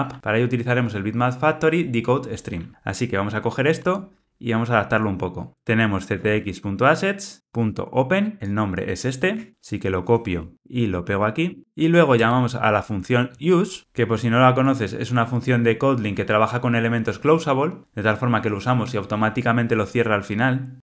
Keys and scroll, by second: 3.8 Tab, 9.3 super+c, 9.5 alt+super+[, 10.5 alt+shift+Left, 13.8 alt+super+[, 14.7 super+b, 20.8 alt+super+[.